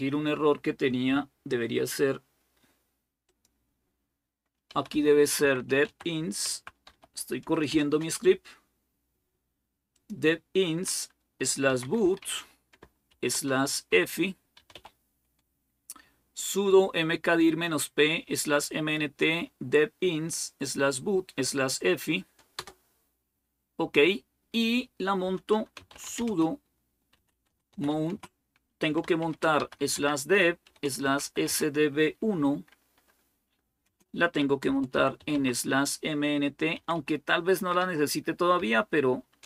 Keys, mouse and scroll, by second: 3.1 click, 4.3-7.5 typing, 9.7-10.8 drag, 11.4-15.0 typing, 22.4 Return, 25.6-27.9 typing, 29.0-32.1 typing, 33.6-35.0 typing, 36.6-39.4 typing.